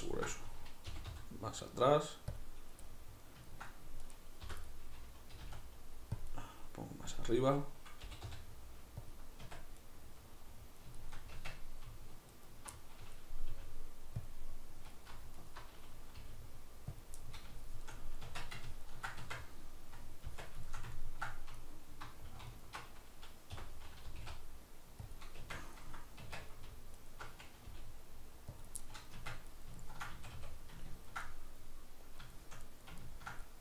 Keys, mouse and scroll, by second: 0.0-2.4 ctrl+middle drag, 0.9 g, 2.4 click, 2.9-4.0 middle drag, 4.0 right click, 4.4 l, 4.7-9.2 middle drag, 5.4 g, 8.0 g, 9.2 click, 9.5 Tab, 9.8-12.3 middle drag, 11.3 Tab, 12.3 alt+right click, 12.7-14.3 middle drag, 13.5 g, 14.3 click, 14.5 middle click, 15.4 alt+right click, 16.1 g, 17.0 click, 17.2-21.6 middle drag, 18.3 Tab, 19.2 Tab, 20.3 Tab, 21.6 alt+right click, 22.6 alt+right click, 23.6 o, 25.2 click, 25.4 Tab, 27.0 alt+right click, 27.7 g, 28.7 click, 28.8-33.6 middle drag, 29.2 Tab, 30.2 a.